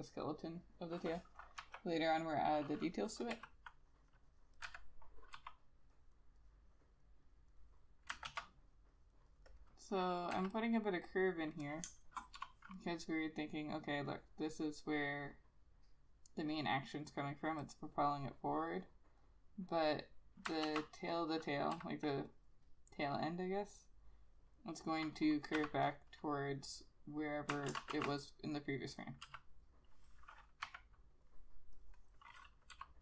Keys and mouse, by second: 2.2 ], 3.4 e, 3.9 double click, 4.9 n, 5.5 b, 7.7 double click, 8.4 ctrl+z, 9.1 double click, 10.5 e, 12.0 space, 12.9 b, 14.0 double click, 20.8 ctrl+z, 21.8 e, 25.7 b, 27.8 ctrl+z, 28.1 ctrl+z, 29.6 e, 30.8 ], 32.8 b.